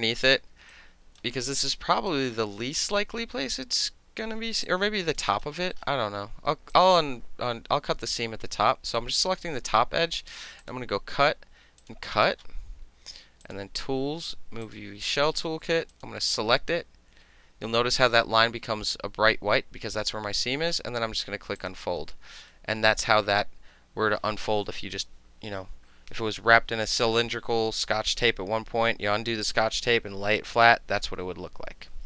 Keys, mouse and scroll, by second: 0.7 alt+right click, 1.5 alt+right click, 4.6 alt+click, 5.3 alt+right click, 5.5 alt+middle click, 6.7 alt+click, 10.6 click, 11.8 click, 13.4 click, 14.6 click, 15.9 click, 21.6 click, 22.5 alt+middle click.